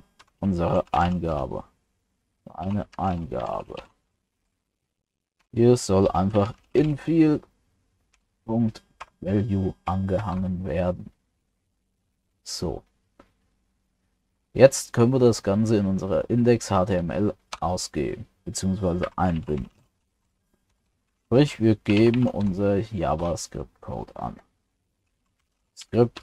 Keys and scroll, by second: 10.2 ctrl+s.